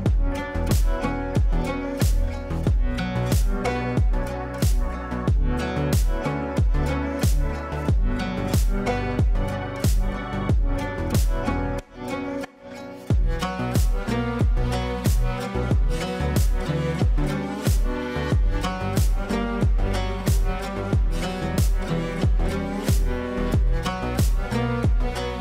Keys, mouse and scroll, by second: 0.3-1.5 typing, 2.7-7.5 typing, 9.1 F2, 9.6-13.0 drag, 13.0 shift+click, 13.8 b, 14.8 click, 15.2 F3, 16.2 F2, 16.4-18.7 drag, 20.2 shift+right click, 22.8 click, 23.7 right click, 25.0 click.